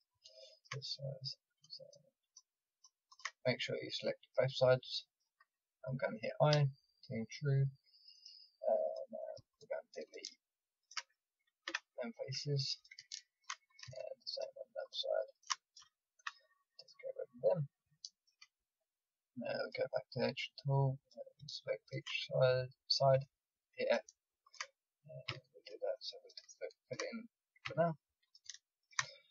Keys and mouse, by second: 0.3 click, 0.5 middle click, 1.3-3.5 drag, 3.5 middle click, 3.8 click, 4.7 middle click, 6.5 i, 8.8-11.6 drag, 11.6 Delete, 12.8 middle click, 13.6-16.1 drag, 16.1 Delete, 17.6 middle click, 20.1-23.1 drag, 23.1 f, 25.2 f, 25.4 click, 27.6-29.3 drag, 27.6 f.